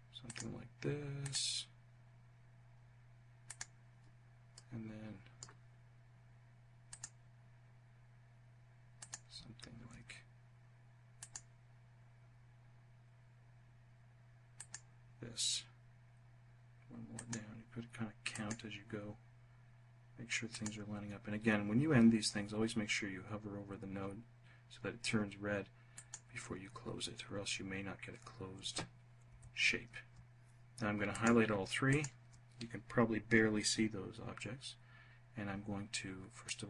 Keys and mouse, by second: 0.4 click, 2.6 click, 4.2 click, 6.1 click, 8.1 click, 10.3 click, 13.7 click, 16.3 click, 17.4 click, 19.7 click, 25.1 click, 28.4 f, 35.5-36.5 drag.